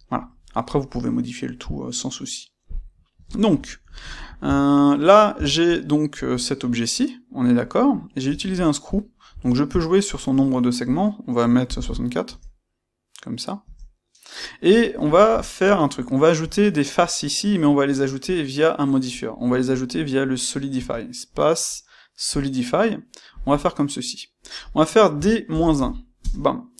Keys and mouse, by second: 2.7-19.3 middle drag, 4.4 Tab, 5.3 Tab, 8.2 space, 8.9 space, 13.6 KP_Enter, 20.7 space, 22.3 space.